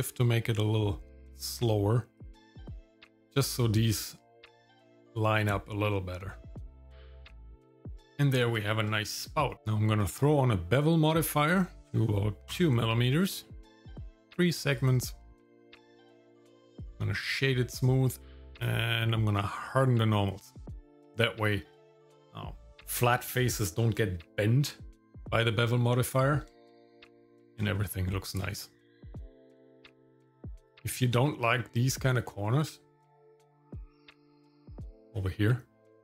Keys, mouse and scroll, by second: 6.5 Tab, 7.4 shift+middle click, 8.0 scroll down 1, 8.1 shift+middle click, 8.6 shift+middle click, 9.0 middle click, 9.5 scroll down 1, 10.0-11.4 drag, 11.8 click, 14.6 click, 14.8 click, 16.2 right click, 16.9 right click, 18.5 click, 19.7 click, 20.5 shift+middle click, 26.5 shift+middle click, 27.1 scroll up 1, 27.6-30.0 shift+middle drag, 30.2-30.6 scroll up 1, 30.7 shift+middle click, 31.2 middle click, 32.2 middle click, 34.3 shift+middle click, 34.7 middle click, 35.0 scroll up 2.